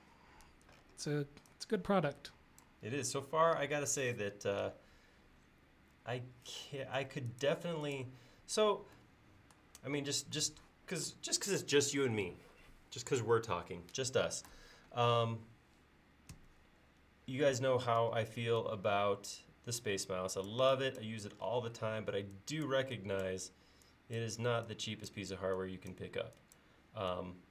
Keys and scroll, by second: 7.1 space, 16.4 Delete, 18.0 e.